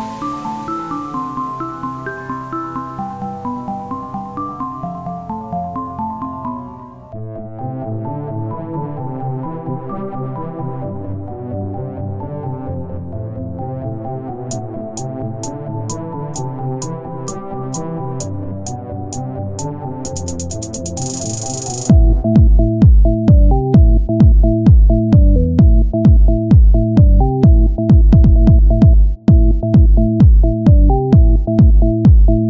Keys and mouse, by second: 0.5 ctrl+Tab, 1.2 click, 1.5 KP_1, 3.8 ctrl+Tab, 4.4 z, 5.2 x, 6.0 ctrl+Tab, 6.6 KP_1, 9.8 z, 10.0 c, 10.4 z, 10.6 c, 12.8 click, 13.6-15.0 drag, 15.0 z, 15.2 Tab, 18.3 click, 18.8 Tab, 23.1 KP_3, 29.1 KP_1, 30.6-32.4 z.